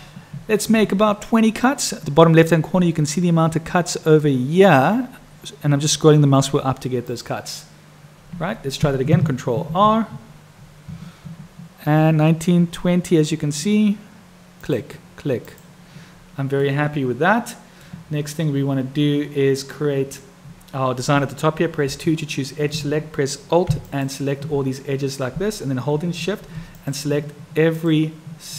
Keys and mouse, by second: 9.6 ctrl+r, 16.7-17.9 middle drag, 26.8 shift+click.